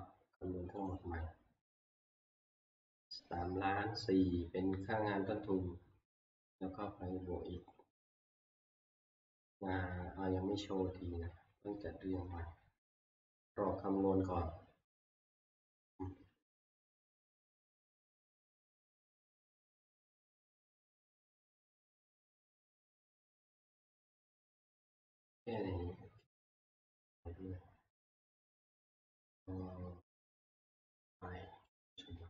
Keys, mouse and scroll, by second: 0.9 click, 0.9 scroll, 24.3 click, 26.4 click, 29.1 middle click, 31.8 right click.